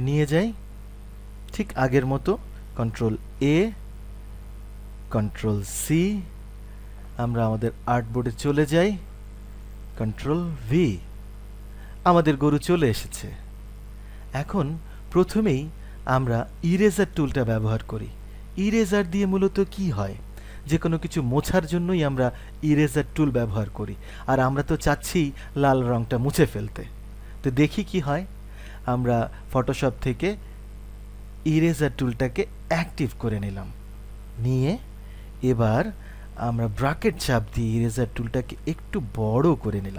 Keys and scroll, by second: 3.3 ctrl+a, 5.7 ctrl+c, 9.8 ctrl+c, 10.6 ctrl+v.